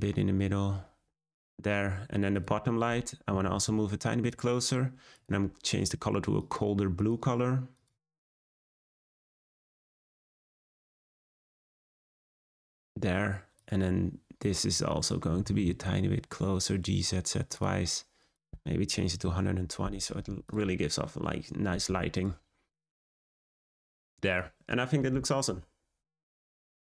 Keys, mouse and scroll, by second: 1.1-2.4 scroll down 1, 2.4 click, 3.3 g, 5.1 click, 13.7 click, 14.5 scroll up 1, 15.4 g, 18.4-20.5 drag, 22.6 scroll down 1, 23.4 scroll up 1, 24.3 click.